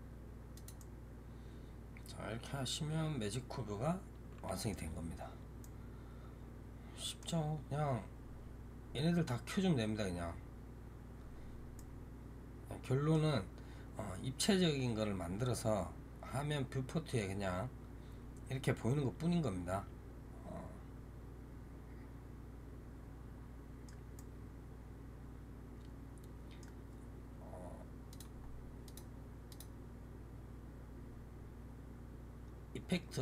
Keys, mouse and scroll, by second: 0.6-9.7 middle drag, 9.7-10.5 scroll down 9, 10.5-11.0 scroll up 1, 11.0-11.6 scroll up 1, 11.6-19.3 middle drag, 24.0-27.1 middle drag, 28.0 click, 28.7 click, 29.4-32.4 drag.